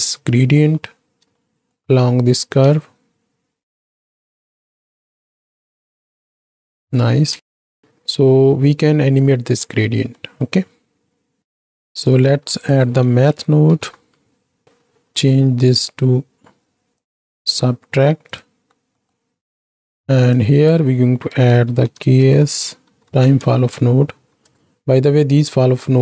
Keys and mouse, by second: 1.3-1.7 shift+drag, 2.7 space, 5.5 shift+Left, 7.2 space, 9.8 click, 10.3 middle click, 11.4 right click, 12.3 shift+a, 14.6 click, 17.1-18.4 drag, 19.1 middle drag, 20.3-26.0 drag.